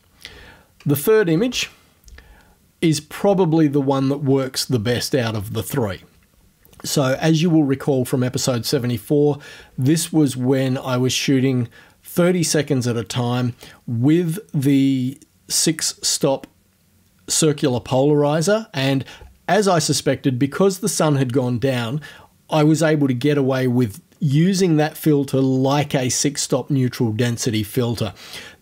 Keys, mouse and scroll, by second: 1.3 space.